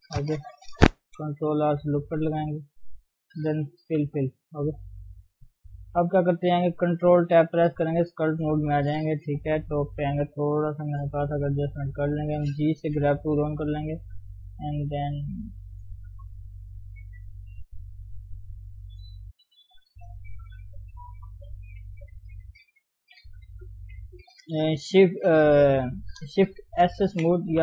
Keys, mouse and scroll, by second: 1.6 ctrl+r, 2.7 click, 3.9 f, 4.1 f, 4.5 scroll down 1, 4.8 KP_3, 5.2-5.6 scroll up 2, 5.6 Tab, 5.8-6.5 scroll down 3, 6.5 ctrl+Tab, 8.5-9.4 scroll up 3, 9.4-9.7 scroll down 3, 9.7 KP_7, 10.2-10.7 scroll up 1, 10.7 g, 10.9 f, 11.5 scroll up 1, 11.7-13.0 shift+middle drag, 13.0 g, 13.4-15.5 drag, 15.5 middle click, 16.4 click, 17.0-18.5 middle drag, 18.5-19.8 drag, 19.8 KP_1, 20.4 scroll up 1, 20.5-21.0 scroll down 4, 21.6 scroll down 1, 21.6 KP_3, 22.0-22.5 scroll up 1, 22.5 shift+middle click, 23.0 shift+s, 23.3 f, 26.8 shift+s.